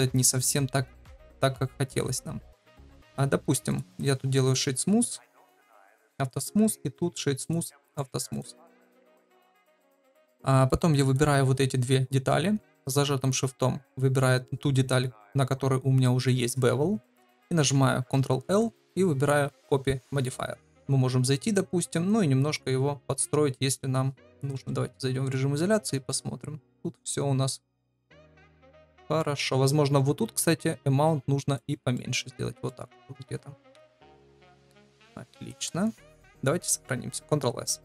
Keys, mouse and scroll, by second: 4.1-4.5 drag, 4.5 right click, 7.4 click, 7.8-8.4 right drag, 10.1 click, 18.1 ctrl+l, 21.2 click, 22.5 click, 24.5 KP_Divide, 25.2 middle drag, 26.0-26.8 shift+middle drag, 26.9-28.1 middle drag, 28.3 shift+middle drag, 28.7-29.1 middle drag, 30.3-31.5 shift+drag, 31.9-32.6 middle drag, 33.7 KP_Divide, 35.1 middle click, 37.7 ctrl+s.